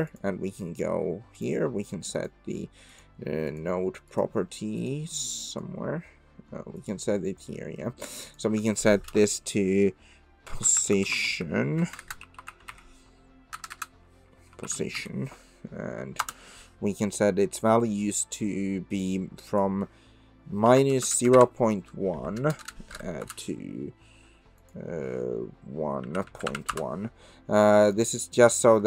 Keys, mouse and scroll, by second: 0.1 click, 1.4 click, 2.2 click, 3.0 click, 4.1 click, 4.8 click, 5.6 click, 6.8 click, 8.2-16.8 drag, 12.0 BackSpace, 13.7 BackSpace, 19.5-23.8 drag, 22.6 BackSpace, 24.6-27.4 drag, 27.8-28.8 drag.